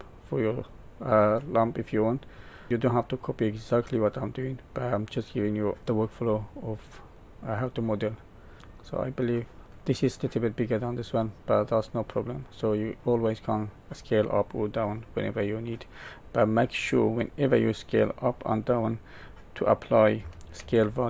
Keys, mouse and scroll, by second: 0.9-1.6 scroll down 4, 2.3 middle click, 3.8 middle click, 5.9-6.4 scroll up 1, 6.5 middle click, 8.6 middle click, 11.4 middle click, 13.1 middle click, 15.6 middle click, 20.5 ctrl+a.